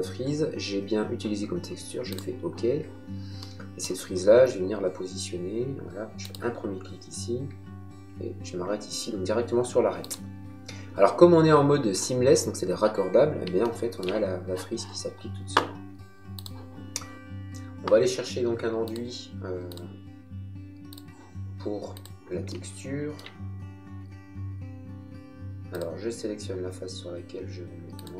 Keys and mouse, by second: 2.1 click, 6.2 click, 9.9 click, 16.4 click, 16.9 click, 17.2 middle click, 18.9 click, 22.5 shift+middle click, 25.7 click, 27.9 click.